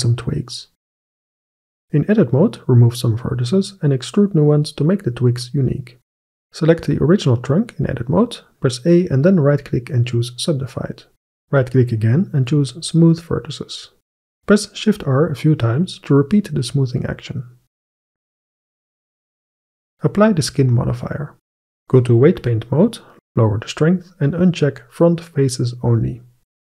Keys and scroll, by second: 1.8 Tab, 3.2 c, 3.7 Escape, 3.8 Delete, 5.9 Tab, 8.8 a, 14.9 shift+r, 17.3 shift+s, 19.3 Tab.